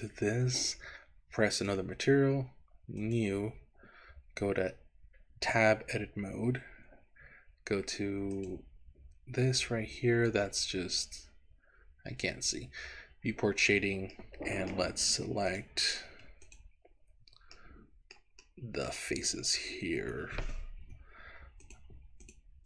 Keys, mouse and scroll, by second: 1.6 click, 3.0 click, 5.4 Tab, 8.4 click, 14.2 middle click, 15.5 click, 16.4 click, 17.6 middle click, 18.6 middle click, 19.5 scroll up 2, 21.6 shift+click, 22.4 shift+click.